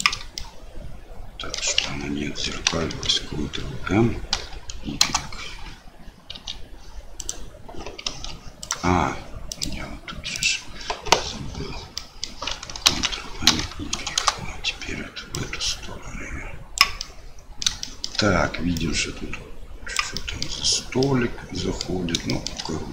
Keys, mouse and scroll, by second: 0.4-1.6 shift+middle drag, 2.6 ctrl+m, 6.3 r, 8.0 r, 9.6 click, 12.0 middle click, 12.8 ctrl+m, 15.4-17.0 drag, 17.1 middle click, 17.9 shift+middle click, 18.7-19.9 drag, 20.2 middle click, 21.0 click, 21.8 middle click.